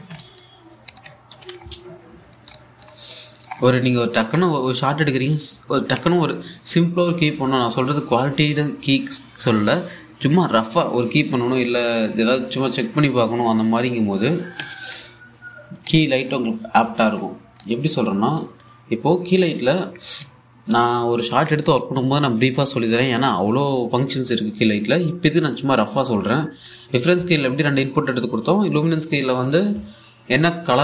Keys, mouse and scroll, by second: 0.4 ctrl+c, 0.5 scroll down 1, 0.8 alt+click, 1.9 ctrl+v, 2.2-3.0 scroll up 1, 3.1 scroll down 1, 3.2-5.3 alt+drag, 15.6-16.4 scroll up 1, 16.8 click, 17.2-17.5 scroll down 1, 17.5 middle click, 17.9-18.2 scroll up 1, 18.2 click, 19.4-20.2 scroll up 1, 25.5-26.3 scroll down 1, 26.4-28.2 drag.